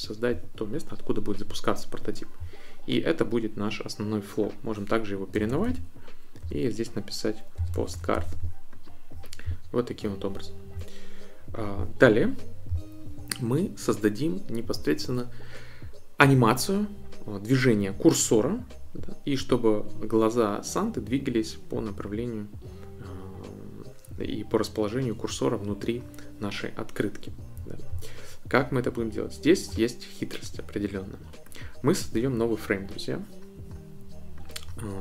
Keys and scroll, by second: 5.1-8.6 typing.